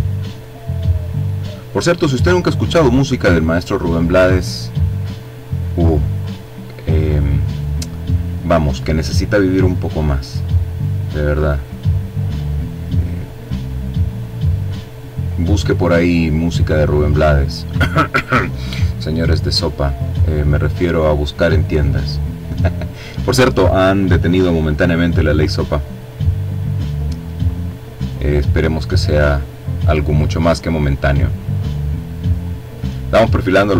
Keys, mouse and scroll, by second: 1.9 click, 3.9-5.0 drag, 6.2-7.2 drag, 8.2-10.6 drag, 18.7 click, 21.1 click, 23.5 click, 24.9-27.3 drag, 27.5 click, 29.5-31.5 drag, 33.3 click.